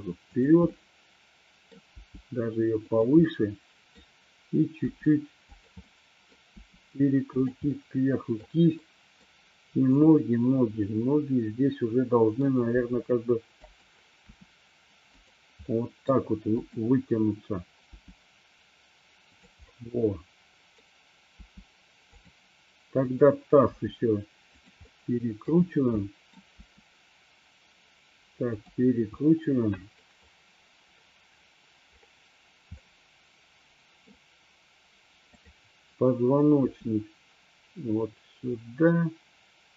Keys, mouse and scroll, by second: 0.5 click, 0.7-1.8 middle drag, 2.0 g, 3.5-4.0 middle drag, 5.0 r, 5.5 click, 6.0 middle click, 6.6 r, 7.7-8.5 middle drag, 9.0 middle click, 10.0 click, 11.0-12.5 middle drag, 12.8 g, 13.7 click, 14.3 r, 15.7-16.1 middle drag, 16.7 click, 18.0 g, 19.5 click, 19.7-20.8 middle drag, 21.5 g, 22.2 click, 23.1-23.6 drag, 23.7 r, 24.6 click, 25.0 middle click, 26.1-26.5 middle drag, 29.2 middle click, 32.8-34.1 middle drag, 35.5 click, 36.7 r.